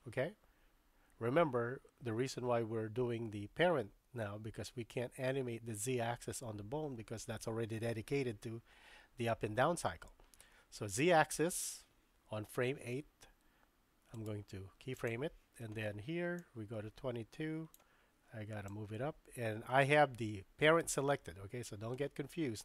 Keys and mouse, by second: 14.1 right click, 16.4-17.8 drag, 18.7-22.6 drag.